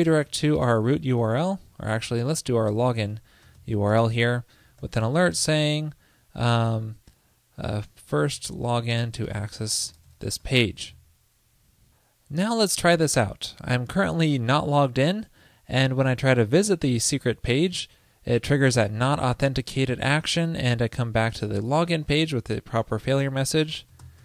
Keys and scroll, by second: 2.1 alt+BackSpace, 5.3 ctrl+l, 11.0 super+s.